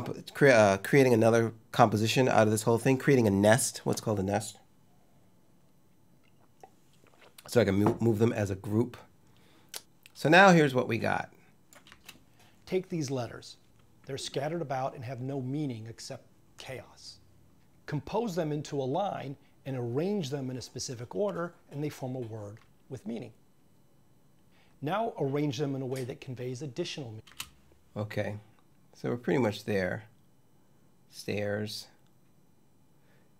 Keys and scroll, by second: 11.7 space, 27.1 space.